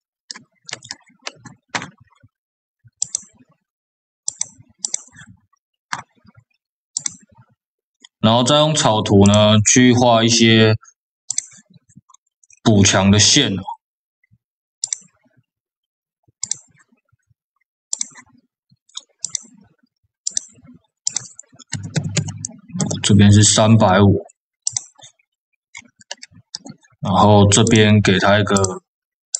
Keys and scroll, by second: 21.8 KP_5, 22.0 KP_0, 22.7 Return.